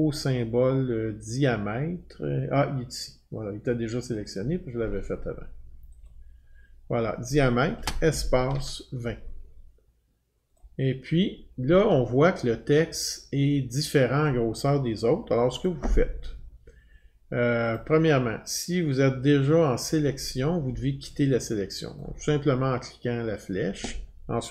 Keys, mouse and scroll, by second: 4.1 click, 4.4 click, 6.1 click, 8.1-9.0 typing, 10.6 click, 15.6 click, 17.7 click, 19.9 click, 22.0 click.